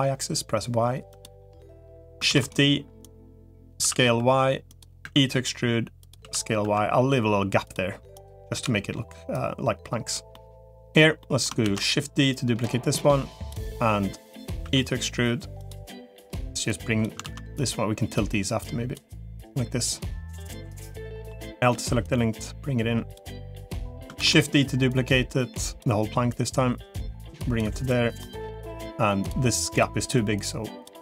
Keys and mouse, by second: 1.3 middle click, 2.1 shift+d, 2.9 click, 3.7 s, 4.9 e, 6.1 s, 8.5 l, 9.3 click, 11.1 middle click, 11.5 shift+d, 12.3-13.5 drag, 14.5 e, 16.7 click, 17.1 ctrl+z, 17.9-18.9 drag, 19.3 click, 20.9 middle click, 21.5 l, 21.9-23.1 drag, 24.1 shift+d, 24.9 click, 26.3-27.5 drag, 28.1 middle click, 30.3 click.